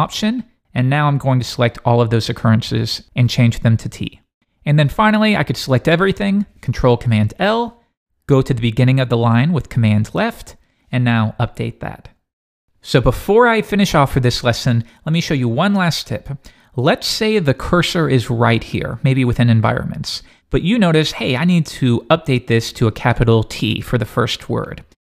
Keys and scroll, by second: 7.3 shift+super+l, 9.8 super+Left, 10.7 Right, 12.6 super+z.